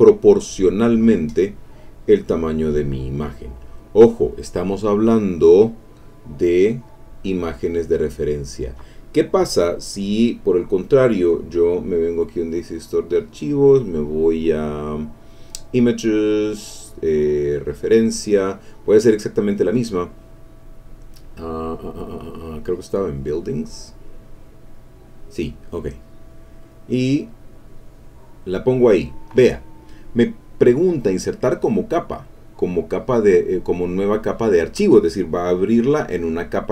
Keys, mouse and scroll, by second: 0.6-3.4 drag, 3.9 click, 10.1 click, 11.8 click, 13.2 click, 15.3 click, 17.5 click, 21.0-24.2 drag, 24.5 click, 26.0 click, 27.3-29.0 drag.